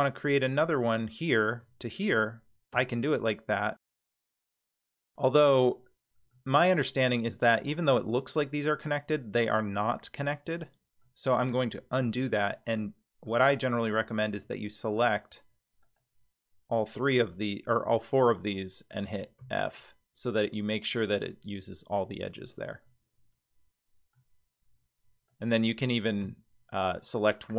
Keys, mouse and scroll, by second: 0.8 click, 1.9 shift+click, 2.8 f, 4.7-5.7 scroll up 3, 5.7 middle click, 6.5-8.0 scroll down 1, 10.6 scroll down 2, 10.7-11.0 scroll up 1, 11.0 middle click, 12.0 ctrl+z, 13.3 click, 14.8 shift+click, 15.8 shift+click, 16.8 shift+click, 18.5 middle click, 19.4 f, 22.8-24.2 middle drag, 25.3 click, 26.2 f.